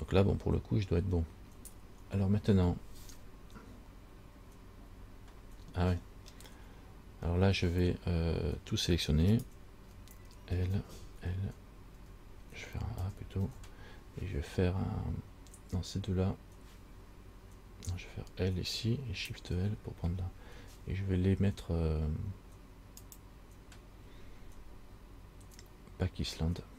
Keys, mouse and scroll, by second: 4.9 Tab, 6.2-6.9 scroll up 2, 6.9-8.1 scroll down 2, 9.6 shift+right click, 10.9 l, 11.4 l, 12.1 l, 13.2 a, 13.7 a, 18.1 l, 20.0 shift+l, 23.2 click.